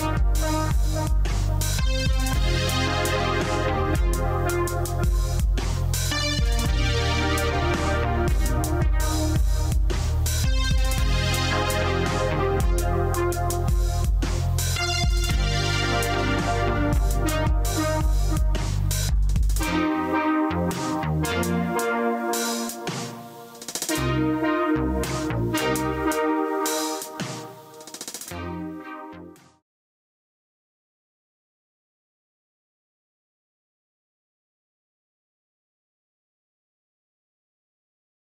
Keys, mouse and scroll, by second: 0.4 q, 2.4 click, 8.5 q.